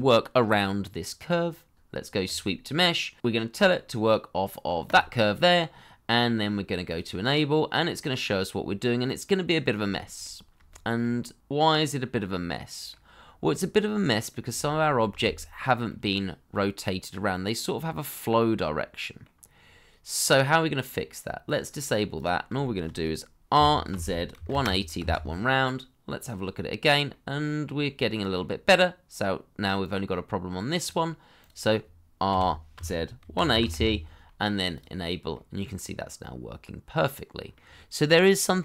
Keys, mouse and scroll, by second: 0.8-1.9 scroll down 1, 5.5 middle click, 9.9 shift+middle click, 12.5 middle click, 14.2 scroll up 1, 14.5 middle click, 15.4 shift+middle click, 15.9 shift+z, 16.5 shift+middle click, 17.0 middle click, 19.5-21.6 scroll down 1, 22.6 shift+middle click, 23.5 r, 24.3 1, 24.5 0, 25.0 Return, 27.1 middle click, 32.3-33.5 typing, 33.7 Return, 35.3 middle click, 37.9-38.2 scroll up 1, 38.3 middle click.